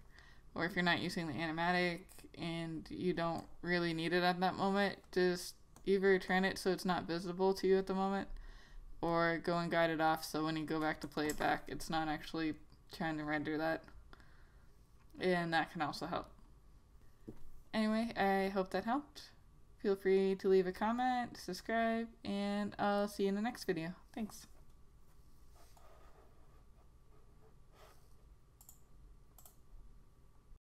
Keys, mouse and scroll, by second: 3.5 click, 9.2 right click, 10.2 click, 11.4 Return, 28.7 click, 29.5 right click.